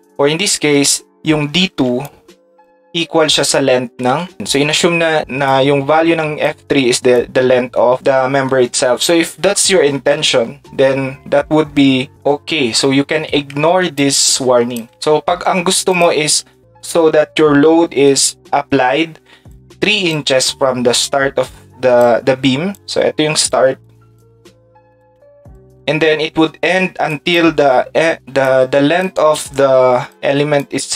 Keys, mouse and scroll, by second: 3.4 Tab, 4.3 Tab, 15.9 click, 19.5 shift+click, 25.0 shift+click, 27.1 shift+click, 28.4 shift+click, 29.3 shift+click, 30.6 shift+click.